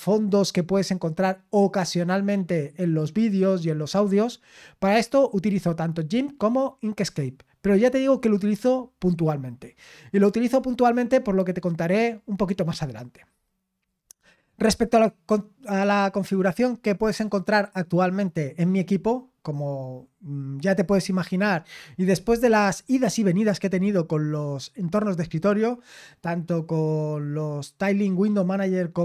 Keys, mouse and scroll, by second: 10.5-10.9 scroll down 4, 11.4 scroll down 4, 12.5 scroll down 2.